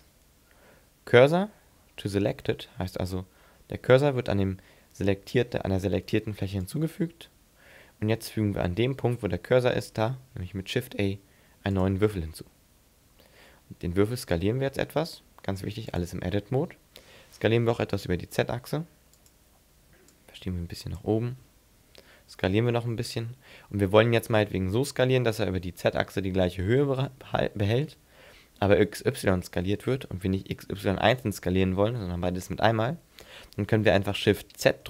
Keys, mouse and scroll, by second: 9.3 middle click, 10.3 shift+a, 14.0 s, 16.0 click, 16.9 s, 19.3 click, 20.1 click, 22.2 s.